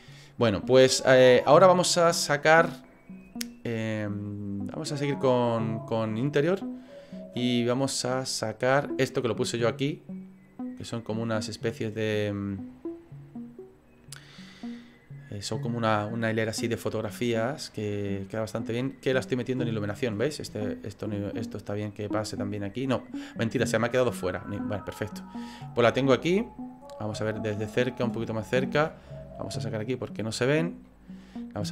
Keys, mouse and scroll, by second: 6.3 click, 19.7 click, 23.3 click, 24.7 click, 26.2 middle click, 26.8 scroll up 5, 27.2 shift+middle click, 27.7 middle click, 28.3 shift+middle click, 29.5 click, 30.8 middle click.